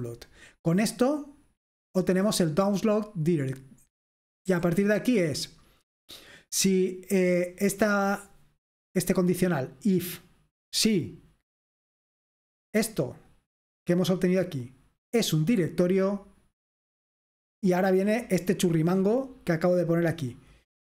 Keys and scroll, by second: 0.0-1.7 typing, 3.6-5.0 typing, 16.7-17.9 scroll down 1, 17.9-20.9 scroll down 1.